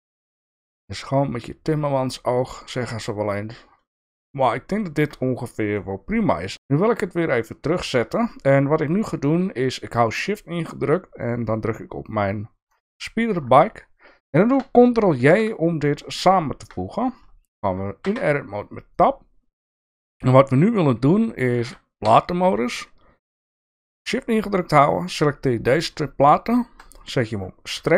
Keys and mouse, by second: 5.8 middle click, 6.5 alt+z, 6.9 click, 7.7 shift+middle click, 12.7 shift+click, 15.2 ctrl+j, 18.0 Tab, 22.0 3, 24.2 shift+click, 25.1 shift+click, 27.7 2.